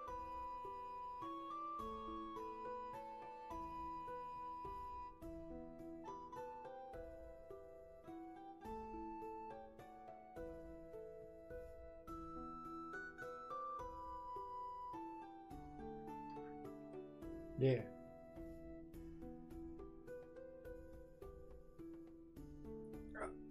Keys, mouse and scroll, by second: 10.8 space.